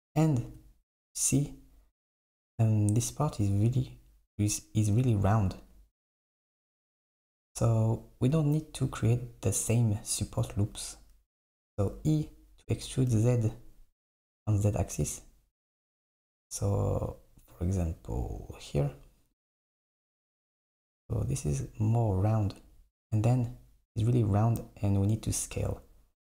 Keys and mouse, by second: 11.8 e, 20.1 Tab, 22.6 Tab.